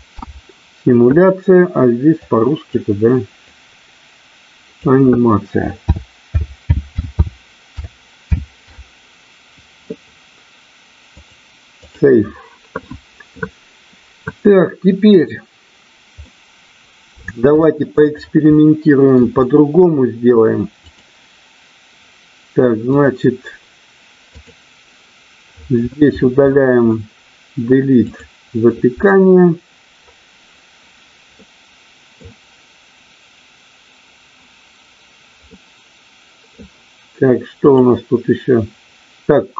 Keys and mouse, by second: 16.2 middle click, 17.6 shift+middle click, 18.4-19.8 middle drag, 20.7 click, 22.8 click, 28.1 click, 31.3 middle click, 35.6 middle click, 37.6 click.